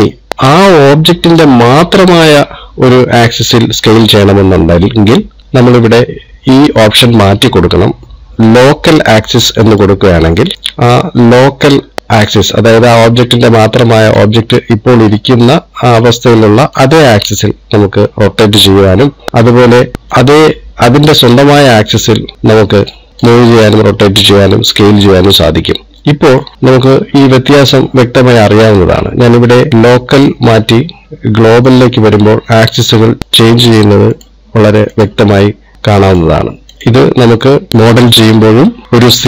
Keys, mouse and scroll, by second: 0.1 click, 6.1 click, 10.6 click, 13.2 click, 15.7 middle click, 17.2 click, 19.9 click, 20.6 click, 22.3 click, 23.1 click, 24.1 middle click, 26.5 click, 27.4 click, 30.6 click.